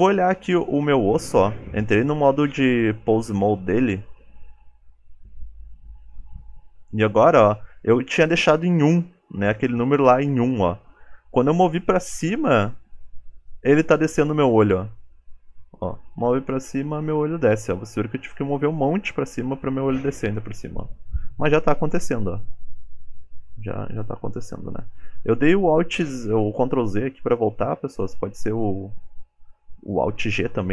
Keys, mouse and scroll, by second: 0.5 ctrl+Tab, 0.9 click, 1.7 f, 15.1 g, 17.9 KP_1, 18.5 g, 27.1-27.5 scroll up 4, 27.6 shift+middle click, 28.9 click.